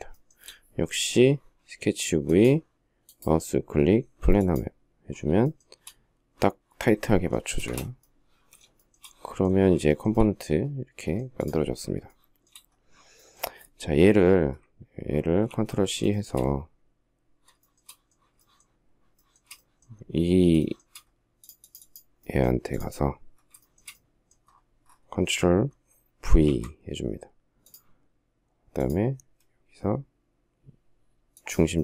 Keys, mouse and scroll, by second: 5.2 shift+middle click, 7.3 space, 7.4 Escape, 8.5 shift+middle click, 8.9 shift+scroll, 9.6 shift+middle click, 9.9 shift+middle click, 11.9 shift+middle click, 14.9 ctrl+scroll down 1, 15.9 shift+middle click, 17.4 shift+middle click, 18.3 shift+middle click, 18.9 shift+middle click, 20.4 shift+middle click, 23.4 shift+middle click, 26.2 ctrl+v, 31.6 shift+middle click, 31.7 shift+double middle click.